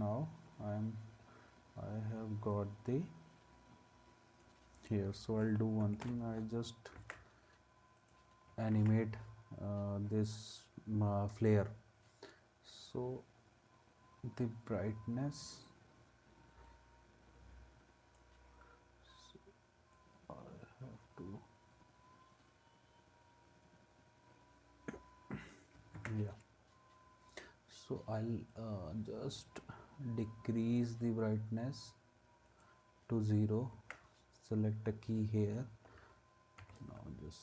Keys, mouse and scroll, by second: 6.0 alt+[, 7.0 ctrl+s, 8.7 ctrl+s, 26.0 ctrl+s, 33.7 ctrl+s, 36.6 u.